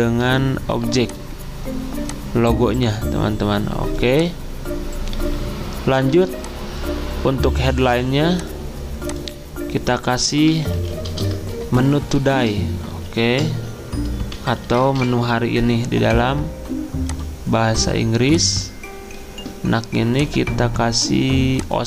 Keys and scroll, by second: 6.1 z, 8.8 typing, 10.2-15.5 typing.